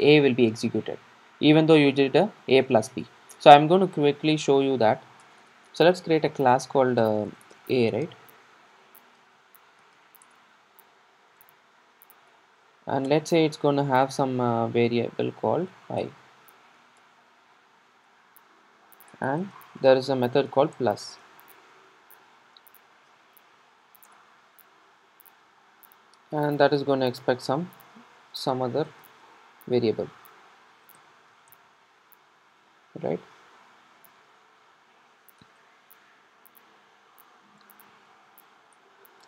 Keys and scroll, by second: 13.1 Return, 38.7 Return.